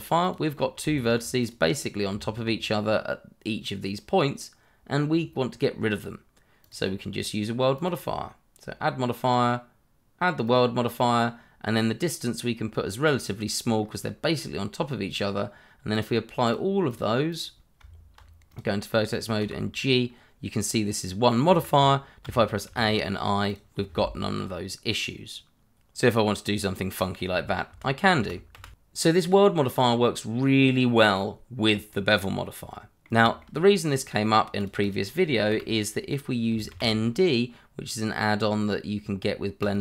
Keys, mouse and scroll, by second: 0.2 click, 0.5 scroll up 1, 0.8 Tab, 1.4 click, 2.1 Tab, 4.1 scroll down 1, 6.6 click, 10.4 click, 13.8 scroll up 1, 16.0 click, 17.0 double click, 17.8 Tab, 18.5 click, 19.4 g, 21.5 Escape, 22.2 a, 22.6 i, 23.5 click, 25.8 alt+e, 27.0 click, 27.5 scroll down 1, 28.0 middle click, 28.3 ctrl+z, 28.9 scroll up 1, 29.2 ctrl+z, 30.1 ctrl+z, 30.8-32.0 scroll up 1, 32.2 scroll down 1, 32.4 middle click, 34.3 scroll down 1, 34.6 click, 34.9 double click, 35.5 Delete, 36.2 scroll up 1, 36.7 shift+a, 39.6 click.